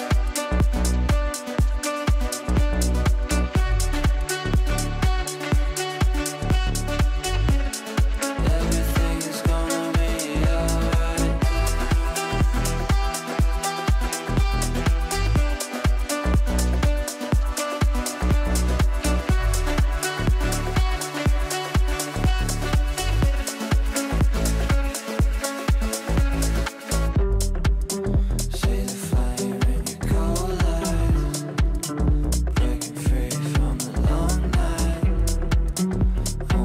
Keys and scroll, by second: 24.6 shift+Page_Down.